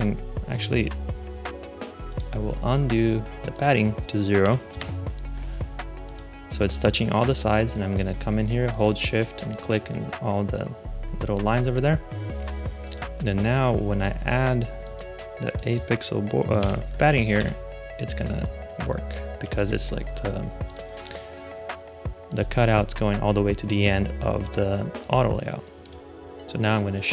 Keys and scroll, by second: 4.3 0, 4.6 Return, 16.5 8, 17.3 Return.